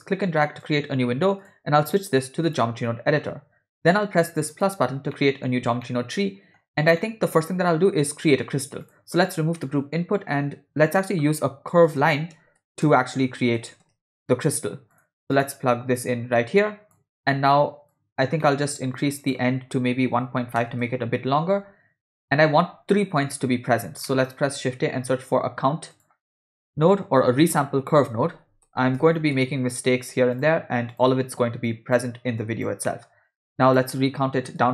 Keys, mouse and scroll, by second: 1.4-2.6 drag, 4.5 click, 5.1 middle click, 5.8 ctrl+middle click, 7.0-7.7 middle drag, 8.8 click, 9.1 x, 9.6 middle click, 10.2 shift+a, 16.0-17.0 drag, 17.3 middle click, 17.9 click, 18.4 middle click, 19.2-20.7 drag, 24.1 middle click, 24.6 shift+a, 27.4 BackSpace, 31.7 click, 32.4 click, 32.8 middle click, 33.6 click.